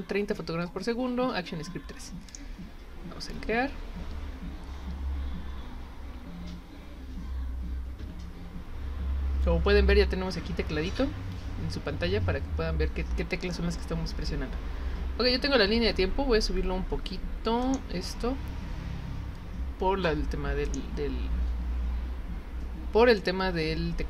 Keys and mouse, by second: 2.3 click, 17.6 click, 20.7 click, 23.1-24.0 drag.